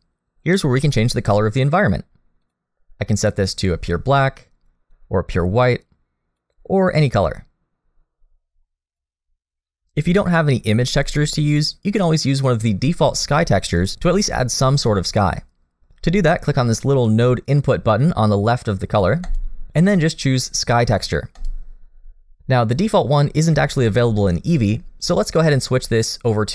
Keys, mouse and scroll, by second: 2.4 click, 19.2 click, 24.6 click, 25.0 click.